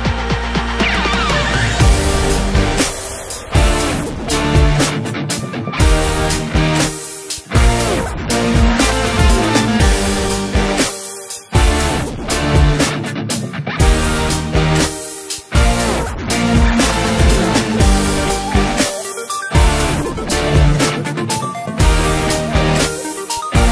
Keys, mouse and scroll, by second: 0.2 click, 1.8-3.2 drag, 3.2 scroll down 1, 3.4 middle click, 3.9-5.4 scroll up 6, 5.4 KP_Add, 7.8 KP_Add, 9.3 3, 9.7-10.1 scroll down 2, 10.1-10.9 scroll up 2, 10.9 s, 18.1 s, 22.2 KP_Add, 22.9 s.